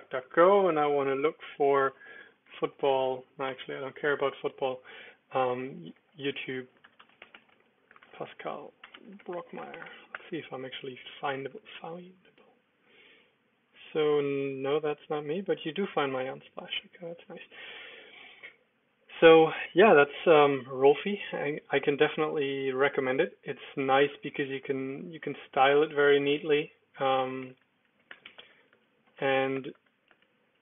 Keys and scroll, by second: 1.7-4.1 typing, 5.3-10.5 typing, 19.3 ctrl+w, 23.9 ctrl+w, 25.0 ctrl+w, 25.2 ctrl+w, 25.9 super+Return, 27.4-30.6 typing, 27.5 Return.